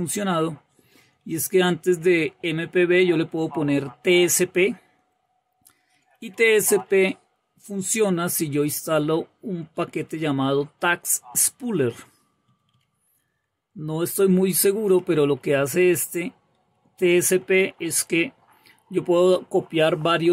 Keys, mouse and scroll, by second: 0.0 Right, 0.4 Right, 0.7 Right, 0.9 Right, 1.1 Right, 1.3 Right, 1.5 Right, 1.9 Right, 2.1 Right, 2.3 Right, 2.6 Right, 3.2 BackSpace, 3.7 Left, 4.4 Left, 5.5 Up, 5.6-6.7 typing, 7.7-8.2 typing, 8.0 Right, 9.1-9.6 Right, 9.8 Right, 10.0 Right, 10.3 Right, 10.3 Right, 11.0 typing, 12.0-12.6 typing, 13.7-18.5 typing, 14.9 Down.